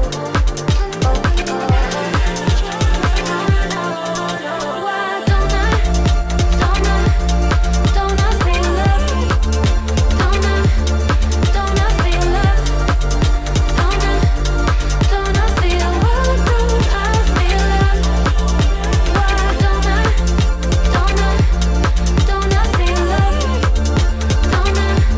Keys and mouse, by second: 0.1 s, 4.4 s, 7.1 shift+click, 7.6 e, 9.1 r, 9.7 s, 10.5 g, 12.1 `, 13.4 click, 14.4 s, 15.7 click, 16.6 ctrl+r, 17.7-18.8 drag, 19.1 s, 20.7 ctrl+r, 22.5 click.